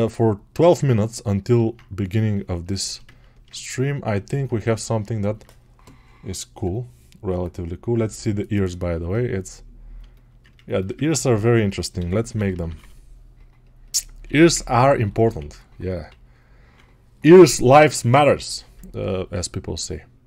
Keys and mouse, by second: 15.2 1.